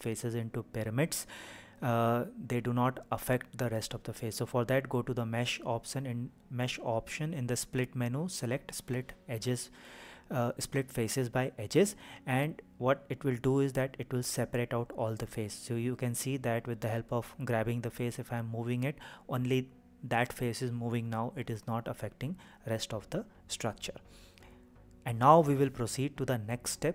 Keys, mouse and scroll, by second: 1.0 Escape, 3.5 a, 7.0-14.4 drag, 15.7 click, 16.6 click, 17.8 g, 20.8 Escape, 22.2 click, 24.6 g.